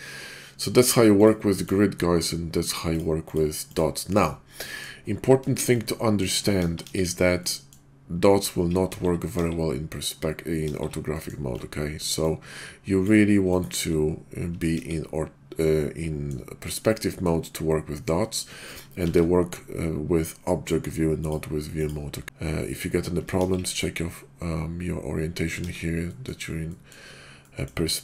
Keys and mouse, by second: 2.8 click, 3.2 click, 3.7 click, 4.6 middle drag, 5.5 shift+middle click, 5.9-6.2 middle drag, 6.6 KP_5, 6.8 KP_5, 7.4-7.7 middle drag, 8.8 KP_5, 9.3 KP_5, 10.6 KP_5, 11.0 middle drag, 12.2-13.1 ctrl+drag, 13.5 click, 14.7 KP_5, 15.6-16.2 middle drag, 16.9-17.2 middle drag, 18.1 middle click, 18.9 shift+v, 23.4 KP_5, 25.6 KP_5, 26.0 middle drag, 26.7 middle drag, 27.4 middle click.